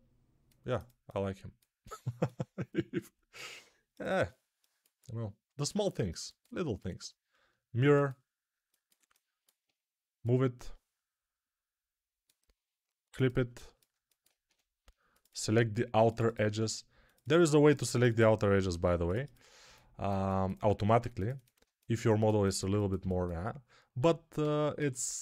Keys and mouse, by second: 13.3-25.2 ctrl+alt+middle drag, 14.3 2, 23.8 e.